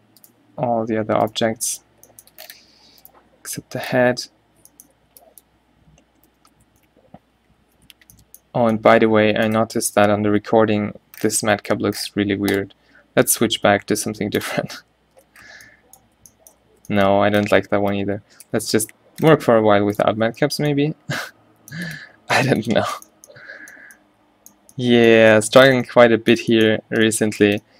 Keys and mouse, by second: 2.7 a, 3.6 h, 4.0-4.4 middle drag, 4.4 z, 5.0 b, 6.4 z, 6.6 m, 7.5 2, 8.0 a, 10.5 n, 12.8-14.1 drag, 15.4-18.6 typing, 20.9 a, 21.2 a.